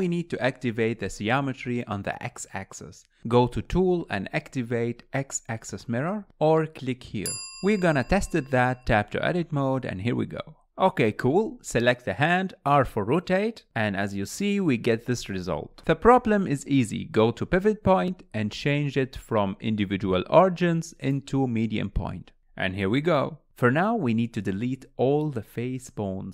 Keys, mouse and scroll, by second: 1.8 click, 2.8 click, 4.0 Tab, 7.3 click, 8.9 shift+middle click, 9.5 click, 10.6 g, 11.7 click, 12.7 r, 17.1-20.1 drag, 20.3 r, 22.9 scroll up 1, 23.2 shift+middle click, 23.6 scroll up 1, 24.5 KP_1, 24.8 alt+z, 25.8 KP_3.